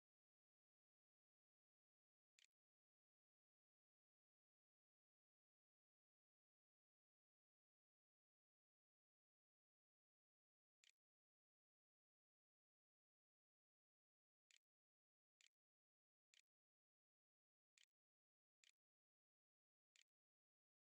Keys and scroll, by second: 0.9-2.4 typing, 5.0-5.8 typing, 9.5-11.9 typing, 13.2-18.5 typing, 19.8 Tab, 20.1-20.8 typing.